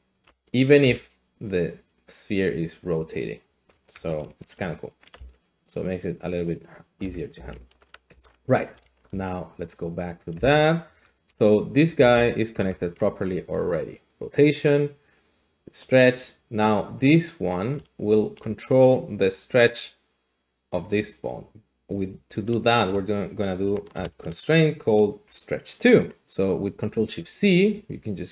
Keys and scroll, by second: 0.8 d, 0.8 r, 3.8 Escape, 5.1-7.5 typing, 7.8 alt+r, 8.1 alt+g, 8.8 alt+s, 10.3 g, 10.8 Escape, 12.0 g, 12.6 Escape, 25.2 ctrl+shift+c.